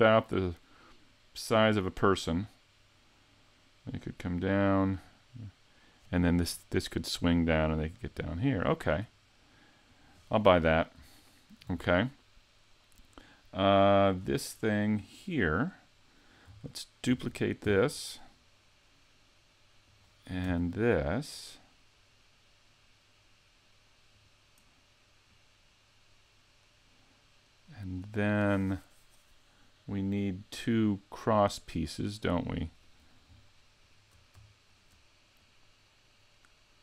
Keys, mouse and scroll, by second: 10.0 click, 10.6-11.3 scroll up 1, 11.3 shift+middle click, 11.3-11.9 scroll up 3, 13.0 right click, 14.2 scroll up 3, 14.8 middle click, 17.1 shift+d, 19.9 click, 20.4 shift+d, 24.2 right click, 25.3 click, 29.6 middle click, 31.7 middle click, 33.8 shift+right click, 34.7 shift+right click, 35.4 click.